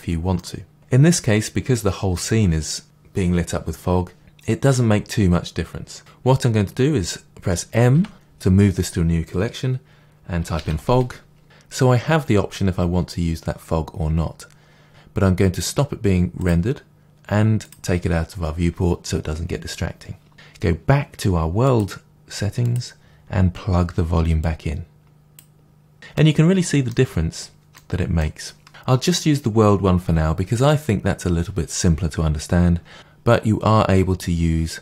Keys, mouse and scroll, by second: 7.9 m, 11.9-13.3 scroll down 2, 13.3-14.8 scroll down 1, 16.5 click, 17.6 click, 21.6-24.5 drag, 26.1-34.8 middle drag, 27.2-27.7 scroll up 3.